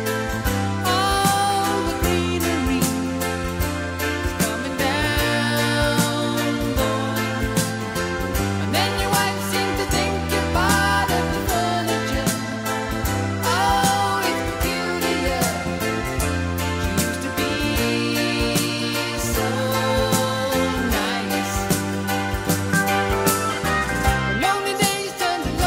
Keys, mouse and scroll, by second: 0.2-2.3 drag, 2.3-12.7 middle drag, 7.0 shift+d, 9.9 r, 12.7-17.8 right drag, 15.2 shift+d, 16.4 r, 20.7 click, 22.5 middle click, 24.0-25.6 middle drag.